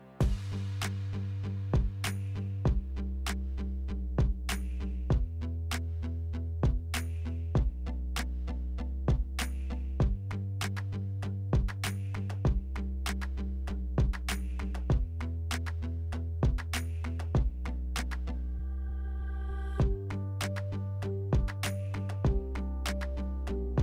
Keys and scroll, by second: 2.3 2, 5.0 s, 8.2 s, 11.7 s, 14.6 s, 16.2 2, 17.8 s, 23.3-23.8 typing.